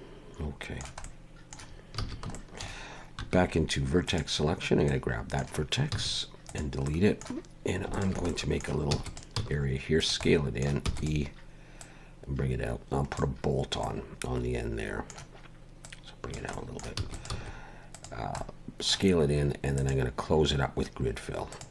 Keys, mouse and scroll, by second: 1.0 middle click, 2.0 alt+a, 2.3 shift+middle click, 3.2 1, 4.1 click, 4.9 middle click, 5.9 x, 6.8 middle click, 7.9 alt+shift+click, 8.3 middle click, 8.9 e, 9.3 s, 10.2 middle click, 10.8 e, 11.8 click, 13.8 middle click, 15.8 click, 16.5 middle click, 17.0 e, 17.3 s, 18.4 middle click, 19.8 click.